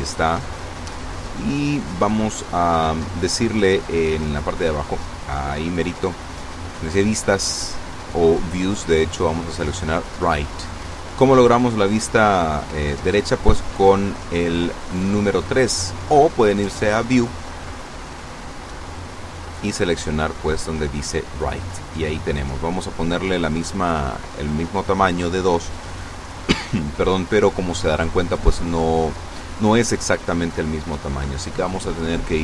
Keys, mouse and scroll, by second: 0.1-0.4 scroll up 1, 1.5 scroll down 1, 3.6-4.3 scroll down 2, 6.6 click, 9.0 click, 10.4 scroll up 1, 10.9 scroll up 2, 11.6 scroll down 2, 12.1 scroll up 2, 15.2 click, 18.7 click, 19.9-20.2 scroll down 2, 21.4 click, 22.4 KP_2, 22.5 KP_Enter.